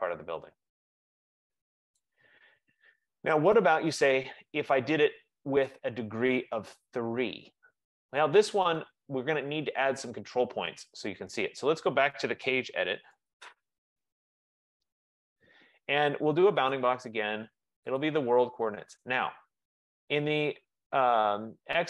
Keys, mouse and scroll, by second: 1.1 F15, 2.1 right click, 2.5 scroll, 3.3 scroll, 4.3 click, 8.5 click, 12.6-14.9 typing, 14.9 Return, 16.9 click, 16.9 typing, 18.1 click, 19.6-20.3 typing.